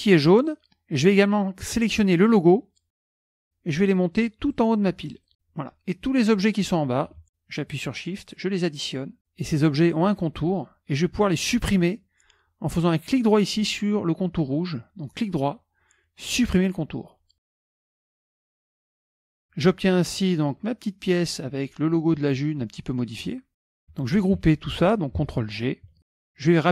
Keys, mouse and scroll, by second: 3.0 shift+click, 4.5 click, 5.1 click, 6.5 click, 7.2 shift+click, 8.3 shift+click, 8.8 shift+click, 16.6 click, 17.5 middle click, 17.5-18.2 scroll up 2, 18.0 middle click, 18.3 KP_Subtract, 20.3-21.7 drag, 23.1 click, 24.3 ctrl+z, 25.9 ctrl+g.